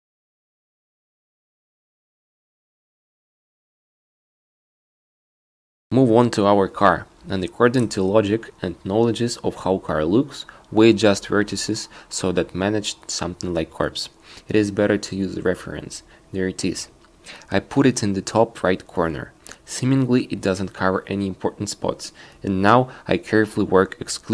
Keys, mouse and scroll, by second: 0.5 ctrl+z, 10.8 q, 14.1 a, 14.3 c, 16.4 q, 16.8 q, 22.2 z.